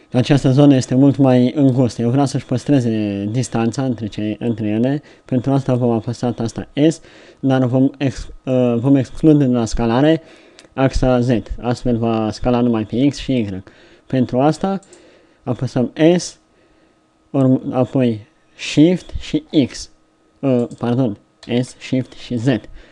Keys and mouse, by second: 6.0 s, 12.2 middle click, 15.6 s, 21.5 s.